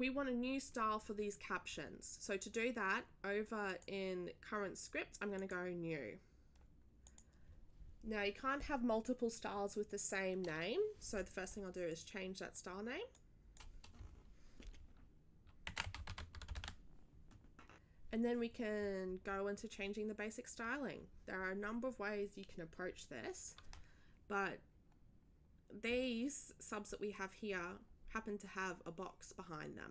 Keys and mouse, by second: 3.7 click, 5.3 click, 7.0 click, 11.9-12.6 drag, 13.1 click, 13.7 click, 15.4-16.5 typing.